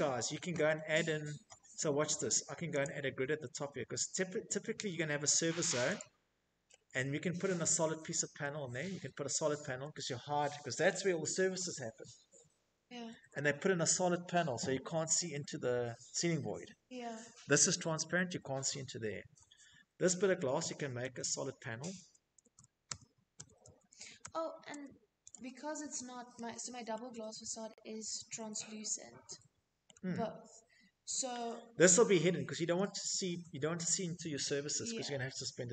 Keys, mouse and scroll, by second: 0.3 click, 2.8 click, 3.4 click, 5.0 middle click, 5.5 middle click, 5.5 middle click, 5.6 Escape, 5.6 middle click, 5.9 Escape, 6.8-7.5 scroll, 16.9 click, 17.1 Escape, 17.1 click, 17.2 Escape, 17.2 click, 18.0 Tab, 18.5 Tab, 19.4 Tab, 19.8 Tab, 22.8 Tab, 23.0 Tab, 23.4 Escape, 23.7 Escape, 27.3 shift+middle click, 27.4 shift+middle click, 28.6 middle click, 28.7 middle click, 28.8 middle click, 28.9-30.0 shift+middle click, 29.9 middle click, 35.6 Escape.